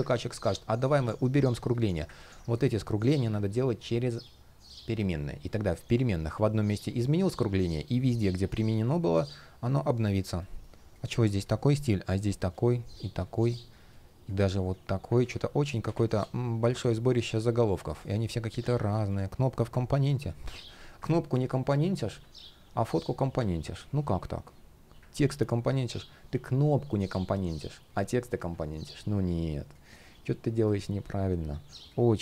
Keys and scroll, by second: 0.6 shift+p, 1.9 super+z, 3.2 super+z, 10.2 shift+p, 14.9 super+z.